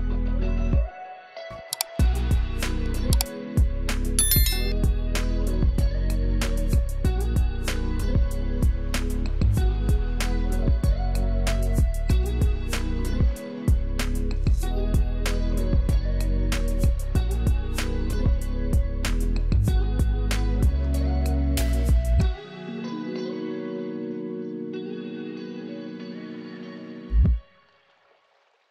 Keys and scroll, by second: 0.6 space, 1.3 space, 2.1 space, 4.4 space, 7.3 alt+space, 7.9 alt+space, 8.6 alt+space, 11.8 space, 13.0 alt+shift+space, 14.3 alt+space, 15.0 alt+space, 16.0 space, 17.0 space, 21.2 alt+shift+space, 21.7 alt+shift+space, 22.3 alt+shift+space, 28.3 alt+space.